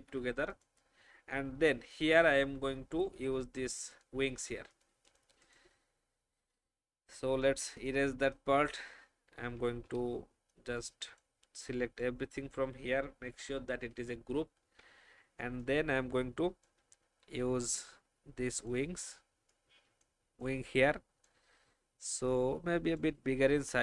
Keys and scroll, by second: 0.0 ctrl+g, 6.4 Delete, 9.8 Delete, 10.7 space, 13.2 ctrl+g, 13.8 ctrl+alt+g, 14.8 ctrl+alt+g.